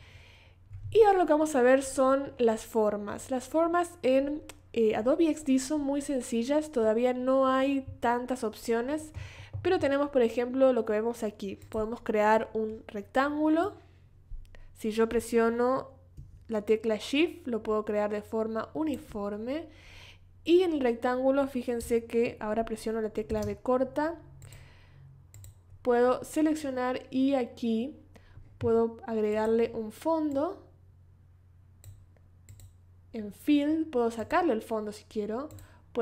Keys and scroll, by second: 23.3 v.